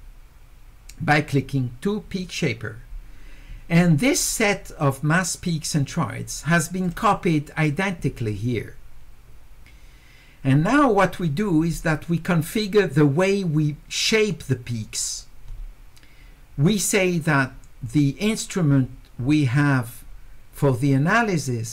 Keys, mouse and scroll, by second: 6.8 click.